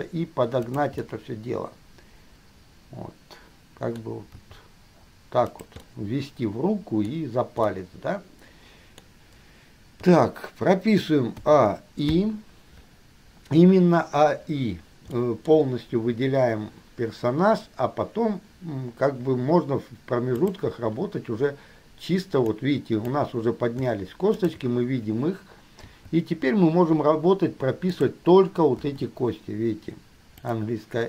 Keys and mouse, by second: 0.0 g, 1.4-2.5 middle drag, 4.5-6.1 middle drag, 4.6 g, 7.3-8.0 middle drag, 9.4 middle click, 10.3 KP_3, 11.6 a, 12.4 i, 15.3-15.6 shift+middle drag, 20.6 click, 22.8 click, 24.5 shift+click, 26.1 g, 29.0 i, 30.6 click.